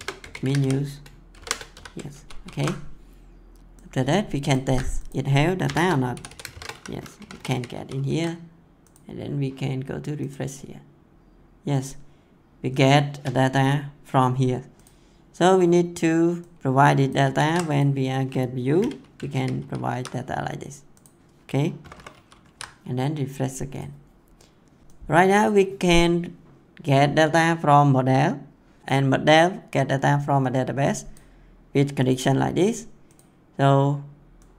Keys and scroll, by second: 0.0-1.7 typing, 2.1 ctrl+s, 4.6 ctrl+c, 5.6 Return, 5.8-7.2 typing, 7.4 ctrl+v, 17.2 ctrl+c, 18.7 ', 19.3 ctrl+v, 21.8 /, 22.1 ctrl+s.